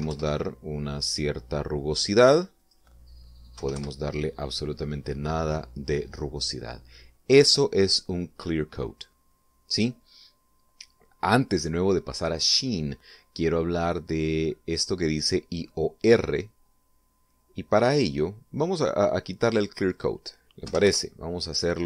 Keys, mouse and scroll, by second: 0.4 1, 0.5 Return, 3.0 click, 4.0 0, 4.2 Return, 20.4 click, 21.1 0, 21.3 Return.